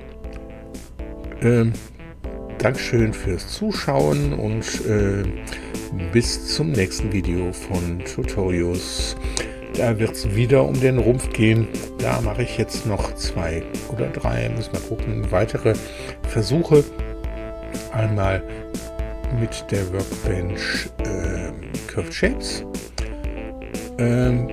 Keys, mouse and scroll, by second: 19.1 click.